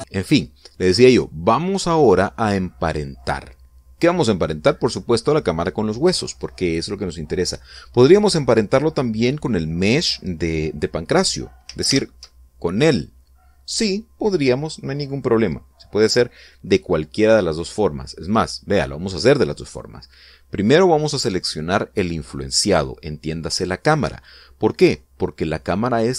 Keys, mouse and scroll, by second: 12.6 alt+h, 18.9 right click.